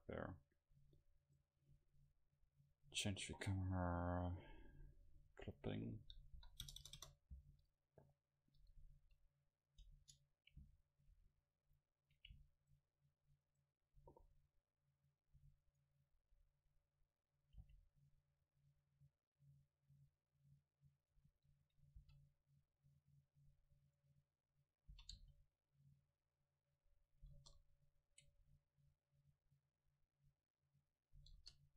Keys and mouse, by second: 1.3-3.2 right drag, 5.5-8.1 drag, 6.9 KP_0, 7.0 KP_0, 9.0 KP_7, 9.8 right click, 10.0 Tab, 12.1 click, 12.4 click, 12.6-15.6 right drag, 15.1-17.7 drag, 15.7-17.7 right drag, 17.7 c, 18.1-20.1 middle drag, 21.1-23.0 middle drag, 22.1 e, 22.3-24.0 right drag, 22.8-24.0 drag, 25.0 s, 27.0-28.1 drag, 27.4 KP_0, 29.0 middle click, 31.4 KP_0.